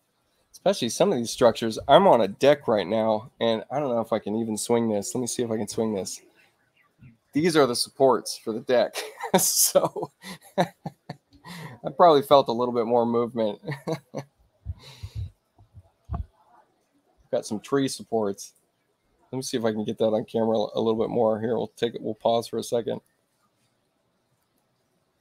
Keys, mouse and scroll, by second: 0.1 space, 22.8 click, 24.3 click.